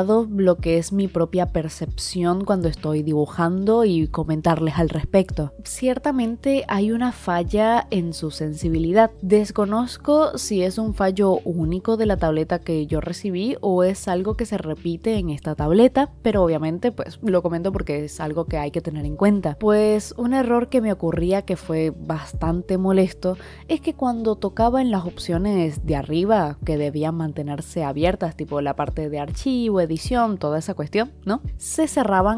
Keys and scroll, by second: 23.6 [.